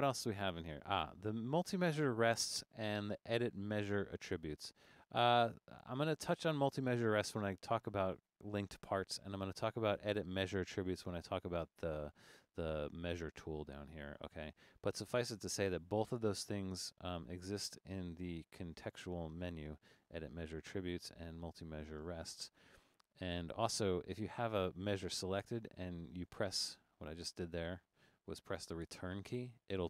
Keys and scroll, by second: 22.6 Return, 28.8 Return.